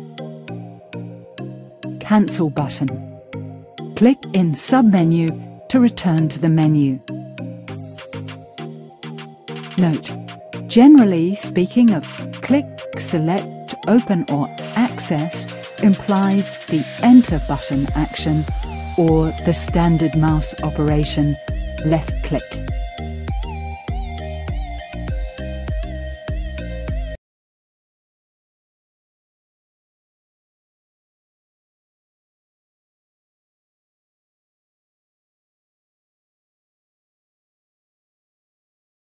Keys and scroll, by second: 2.1 Escape, 16.6 Return.